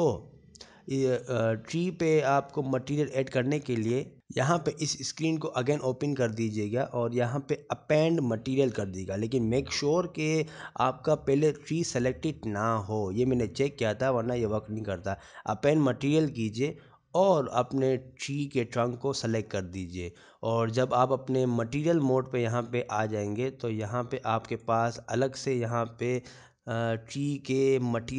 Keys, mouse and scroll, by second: 3.6 scroll down 4, 4.6 click, 12.1 scroll up 1, 14.9 click, 14.9 scroll up 1, 18.1 click, 21.2 click, 24.9 click.